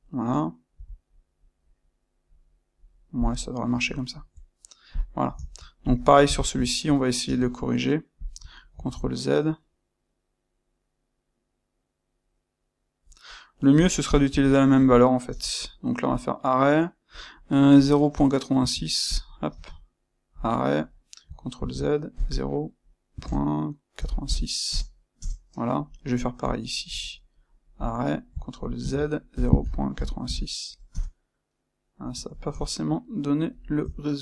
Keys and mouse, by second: 3.9 ctrl+middle click, 4.9 click, 5.2 ctrl+middle click, 5.8 click, 6.2-14.0 ctrl+shift+middle drag, 7.2 space, 14.0 click, 14.4-14.8 shift+middle drag, 14.8 click, 15.2 space, 18.6 Escape, 19.0 click, 19.4 space, 25.1 KP_Enter, 26.4 click, 26.8 space, 32.3-34.2 ctrl+middle drag.